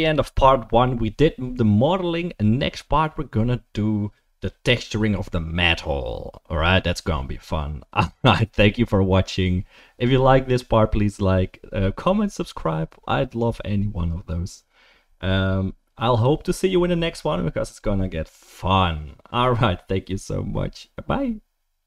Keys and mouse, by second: 2.8 right click, 8.1 click.